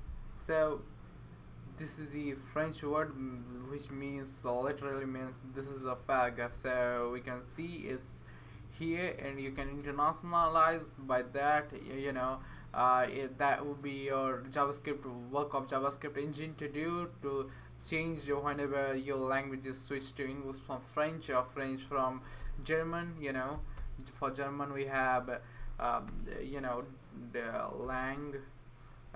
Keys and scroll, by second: 22.4 Return, 23.5 typing, 25.1 Left, 26.1 space, 27.8-29.1 typing.